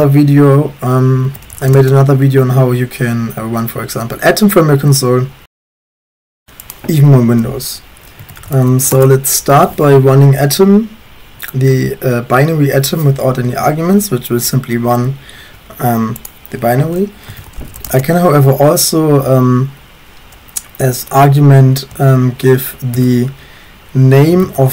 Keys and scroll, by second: 1.1-3.0 typing, 8.0-9.0 typing, 17.1-18.2 typing, 21.7-23.0 typing, 24.1-24.7 typing.